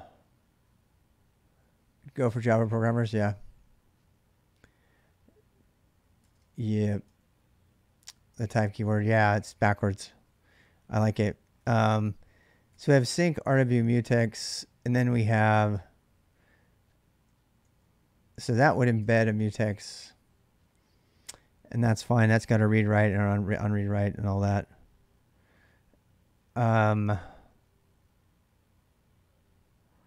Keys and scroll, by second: 6.0-9.4 typing, 11.4-13.6 typing, 15.0 typing, 16.8-19.7 typing, 29.8-30.0 typing.